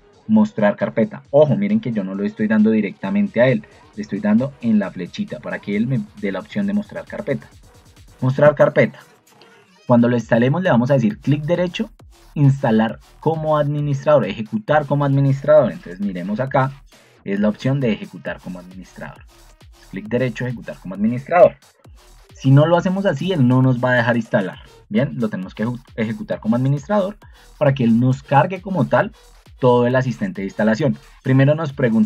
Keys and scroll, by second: 1.6 ctrl+2, 6.2 Escape, 15.9 ctrl+2, 18.6 Escape.